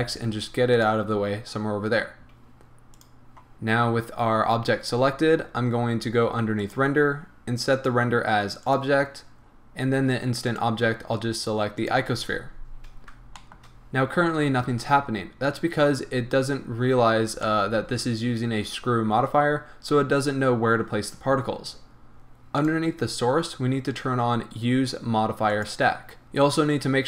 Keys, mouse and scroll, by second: 0.8 click, 2.9 click, 6.6-13.4 drag, 9.5-9.9 scroll down 1, 12.8 scroll up 1, 13.4-22.6 shift+middle drag, 16.1-17.5 scroll up 2, 19.6-22.6 scroll down 2, 22.6 click, 23.2-25.1 scroll up 1, 25.5 click, 26.2-27.0 middle drag.